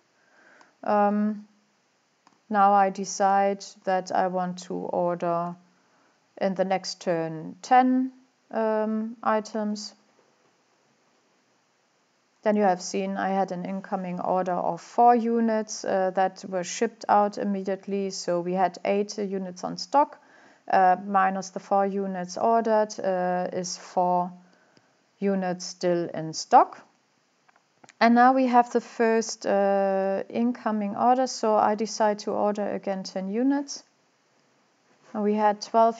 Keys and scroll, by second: 4.8-5.5 typing.